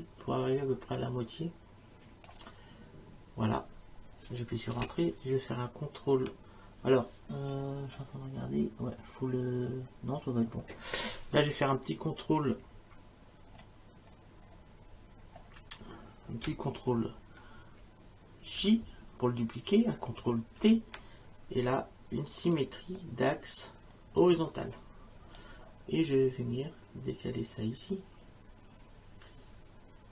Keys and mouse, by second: 4.8 Return, 18.6 ctrl+j, 20.6 ctrl+t, 22.4 right click, 24.2 click, 25.4 click.